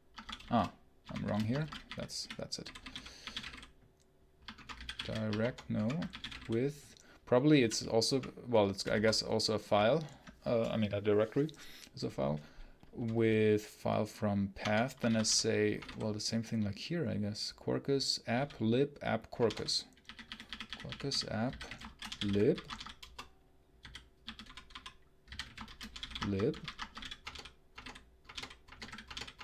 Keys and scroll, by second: 0.0 Escape, 0.1-8.8 typing, 5.6 ctrl+BackSpace, 14.5 Return, 14.8 Escape, 14.9 l, 15.6 space, 15.8 h, 18.2-29.4 typing.